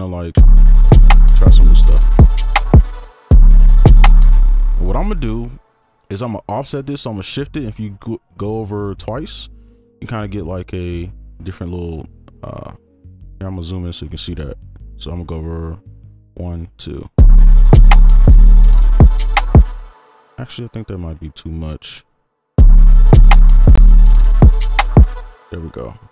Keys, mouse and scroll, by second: 0.3 space, 3.0 space, 3.3 space, 4.3 space, 4.7 right click, 6.1 ctrl+a, 7.9-9.0 shift+scroll down 1, 10.3-11.1 alt+scroll down 1, 11.1-12.1 scroll up 1, 12.1 right click, 13.1 ctrl+click, 13.8-15.1 scroll up 2, 15.4-16.0 shift+scroll up 1, 16.2-17.0 shift+scroll down 1, 17.0 right click, 17.3 space, 18.9 ctrl+right click, 20.0 space, 20.1 ctrl+click, 20.8-22.3 scroll up 1, 22.3 shift+scroll up 1, 22.6 space, 24.1 ctrl+right click, 25.2 space.